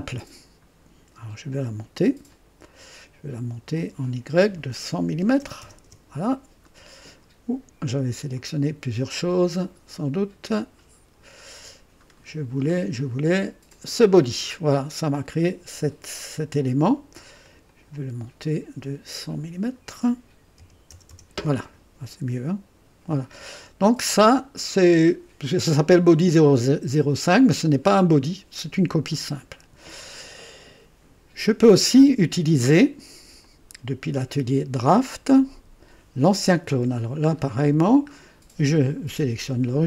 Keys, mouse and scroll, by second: 1.9 click, 3.7 click, 5.1 KP_1, 5.3 KP_0, 5.8 Return, 8.3 click, 9.4 click, 10.5 click, 12.0-12.3 scroll down 1, 12.6-12.9 scroll down 1, 13.7 click, 17.4 click, 19.1 click, 20.6 KP_1, 20.8 KP_0, 23.0 click, 23.5 typing, 35.1 click, 37.2-37.5 scroll up 2, 38.1 scroll up 2, 39.1 click.